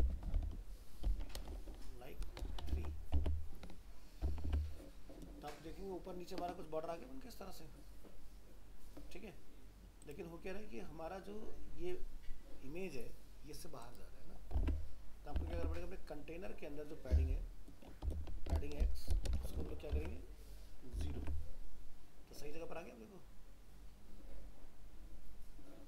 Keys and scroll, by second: 2.7 ctrl+s, 3.2 alt+Tab, 14.6 alt+Tab, 19.6 ctrl+s, 19.9 alt+Tab.